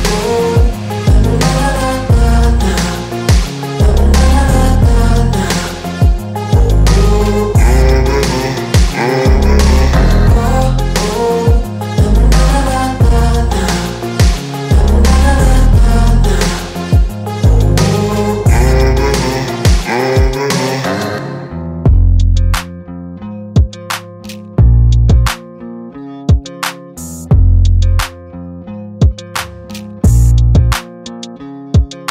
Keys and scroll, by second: 2.8 space, 3.9 p, 5.4 space, 6.5 p, 8.0 Return, 8.5 space, 10.1 r, 14.0 Return, 14.4 space, 15.3 Delete, 16.2 p, 17.3 space, 17.9 f, 19.3 Return, 19.9 p, 21.2 Return, 24.4 r, 26.0 space, 26.4 f, 28.0 Return, 28.3 space, 29.2 Delete, 30.7 p.